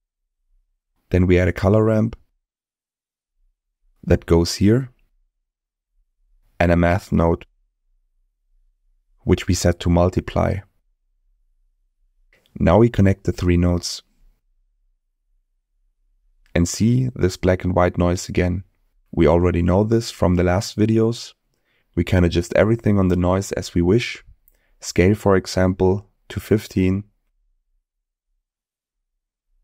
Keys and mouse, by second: 0.4 shift+a, 5.5 shift+a, 9.8-10.9 drag, 13.3 drag, 13.4 click, 14.8 click, 15.0-15.7 drag, 17.2 ctrl+shift+click, 19.4-21.2 drag, 22.0-23.6 drag, 25.2-26.5 drag, 27.8-29.6 drag.